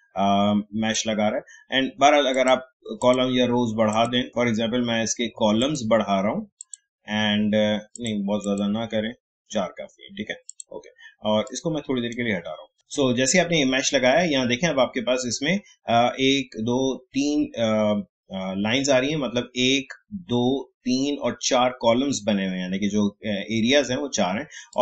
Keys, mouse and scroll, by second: 5.6 click, 12.7 ctrl+z, 14.3 alt+scroll up 1, 24.7-24.8 drag.